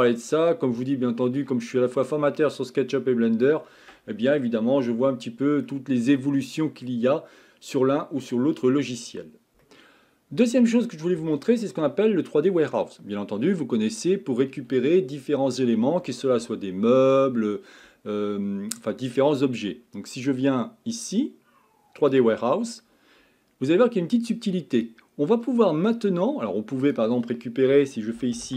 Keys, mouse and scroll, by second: 5.6-8.8 middle drag.